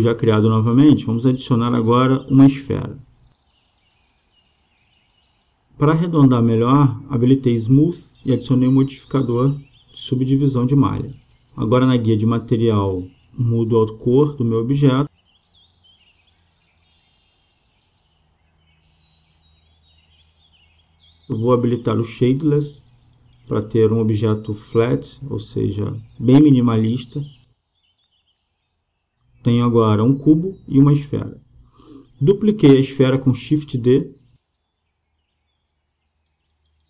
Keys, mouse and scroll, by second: 1.9 space, 8.2-10.0 drag, 10.3-12.1 drag, 13.6-18.2 drag, 20.1 click, 24.1-26.0 drag, 32.3 shift+d, 36.7-36.8 right drag.